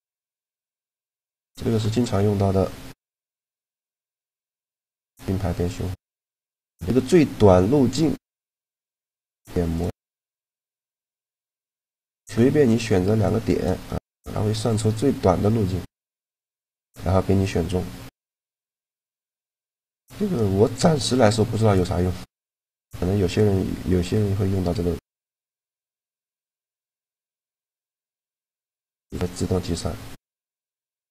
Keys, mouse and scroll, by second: 0.7-2.5 super+right drag, 3.5-5.3 drag, 9.5-11.2 drag, 10.0-11.9 middle drag, 10.8 right click, 13.2-15.0 right drag, 14.4 click, 15.0-16.3 drag, 16.4 middle click, 17.2-19.2 middle drag, 18.6-21.4 right drag, 20.3-22.1 drag, 22.1-24.7 middle drag, 24.7-26.7 right drag, 26.7 click, 26.8 middle click, 27.5 click, 28.3 middle click, 30.3-30.8 scroll up 1, 30.8 scroll down 1, 31.0-31.1 middle drag.